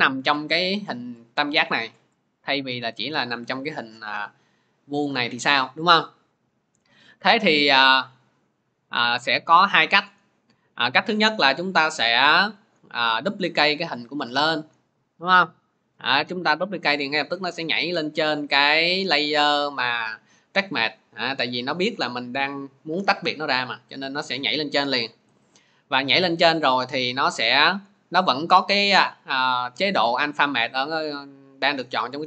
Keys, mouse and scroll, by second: 0.8-10.3 drag, 12.5 click, 14.0 ctrl+d, 19.1-23.7 drag, 25.1 click, 28.4 click, 31.0 click, 31.8 click.